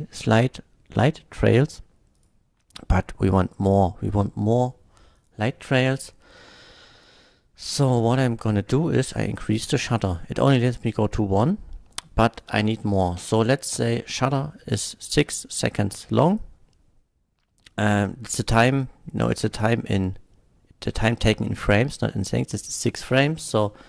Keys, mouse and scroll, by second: 2.2 click, 5.2 click, 7.8 click, 9.5-10.2 drag, 11.0 click, 13.2 KP_6, 13.7 Return, 13.8 KP_6, 22.3 click, 23.4 KP_8, 23.8 Return.